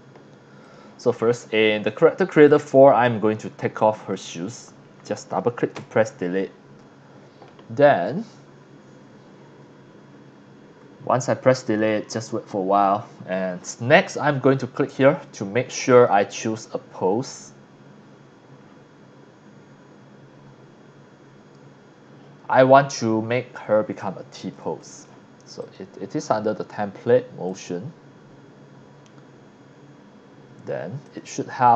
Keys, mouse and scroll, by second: 0.6 click, 1.9-2.3 scroll down 2, 2.4 x, 2.5-3.0 drag, 3.8 click, 5.8 Delete, 13.2 scroll up 2, 14.4 click, 15.9 click, 17.8 scroll down 1, 18.6 scroll up 1, 23.3 scroll down 1, 23.8 x, 24.0-24.5 drag, 24.7 x, 24.8 drag, 25.6 click, 26.5 scroll down 1, 27.5 click, 28.3 scroll down 1, 29.7 scroll down 1, 31.0 click.